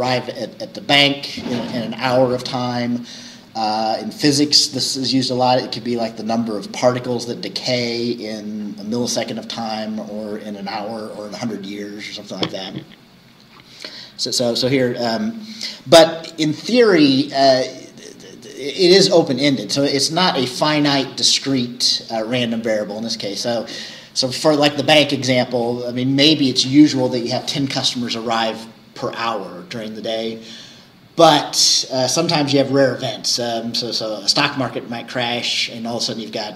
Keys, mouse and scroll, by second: 3.6-7.9 scroll up 1, 7.9-12.2 scroll up 1, 12.2-20.7 scroll up 1, 20.7-25.0 scroll up 1, 25.0-29.2 scroll up 1, 29.2-33.5 scroll up 1, 33.5-36.5 scroll up 1.